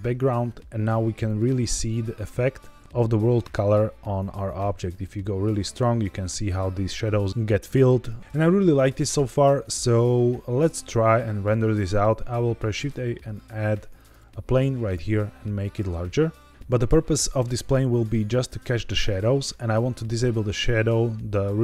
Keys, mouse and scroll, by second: 1.2 click, 2.2 click, 2.8 click, 8.8-9.2 scroll up 1, 9.3 shift+middle click, 12.6 shift+a, 14.9 s, 16.5 click.